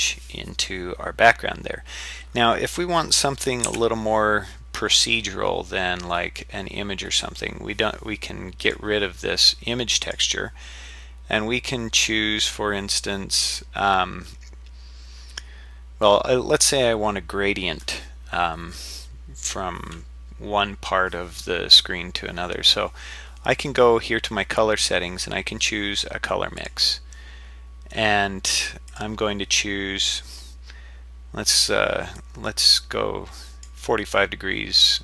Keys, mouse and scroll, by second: 3.7 z, 8.6 click, 10.1-26.7 drag, 28.9-31.0 drag.